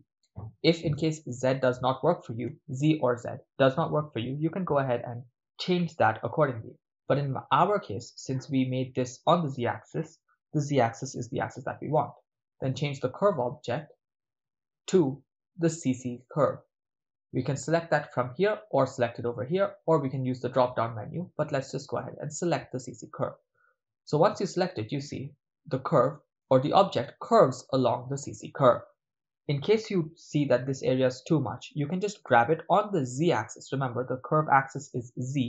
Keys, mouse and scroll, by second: 8.0-8.5 middle drag, 13.6 click, 25.2 ctrl+middle click, 26.2 middle click, 33.3 g, 34.3 z.